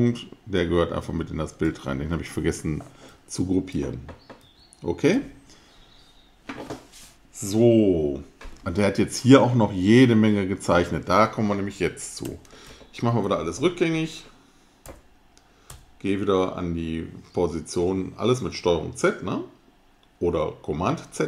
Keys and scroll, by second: 3.1 super+z, 3.8 super+z, 12.7 super+z, 13.2 super+z.